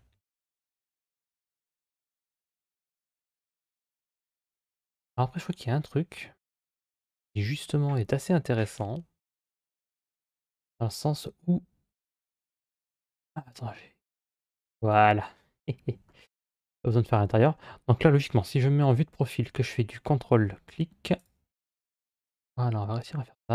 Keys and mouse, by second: 0.5 KP_1, 8.6 KP_Divide, 9.1 KP_Divide, 10.7-12.9 middle drag, 13.8 click, 18.3 KP_1.